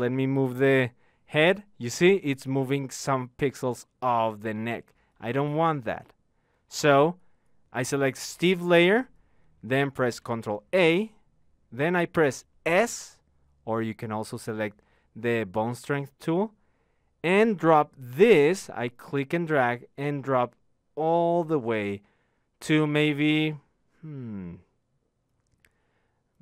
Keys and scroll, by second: 10.1 ctrl+a, 12.5 s.